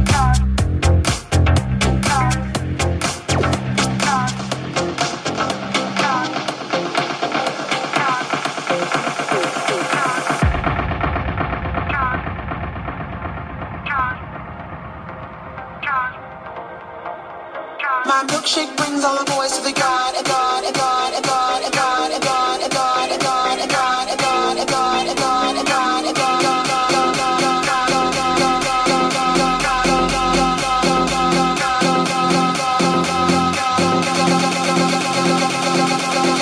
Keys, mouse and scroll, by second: 0.7 g, 1.4 g, 1.7 click, 2.8 g, 3.1 middle click, 4.0 right click, 4.0-5.6 middle drag, 4.6 g, 5.6 right click, 5.6-13.4 middle drag, 6.7 g, 12.1 Tab, 13.0 Tab, 13.5 middle click, 13.7 middle click, 14.6-16.8 middle drag, 15.7 Tab, 16.8 right click, 16.8 middle click, 17.4 right click, 17.5 shift+middle click, 17.7 shift+right click, 17.8-34.2 shift+middle drag, 19.8 ctrl+KP_Add, 23.0 r, 25.8 g, 27.1 r, 28.5 ctrl+KP_Subtract, 29.2 r, 29.6 g, 31.1 g, 31.3 ctrl+z, 32.0 Tab, 34.2 right click, 34.2-36.4 middle drag, 34.8 Tab, 36.2 Tab.